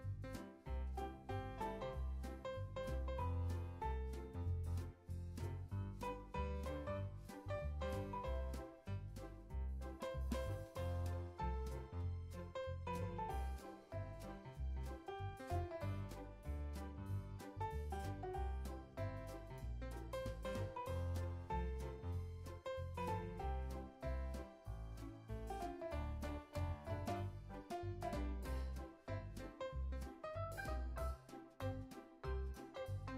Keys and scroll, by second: 0.1 i, 1.1 o, 1.9 super+s, 4.6 super+v, 7.6 super+v, 9.5 super+v, 10.7 i, 11.5 o, 13.0 o, 13.9 i, 14.6 super+s, 19.8 super+c, 22.2 super+v, 23.4 super+v, 23.8 super+s, 26.4 o, 28.4 i, 31.5 super+s.